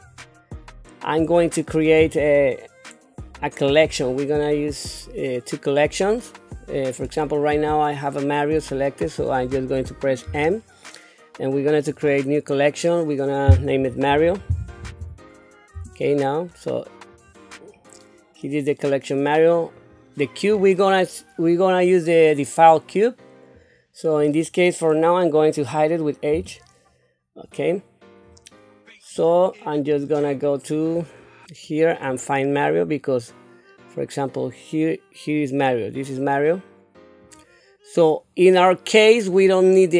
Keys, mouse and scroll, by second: 0.0-1.0 scroll up 4, 10.2 m, 19.7 click, 20.5 scroll up 2, 23.5 click, 26.3 h, 29.2 click, 32.0-37.4 drag, 39.3 click.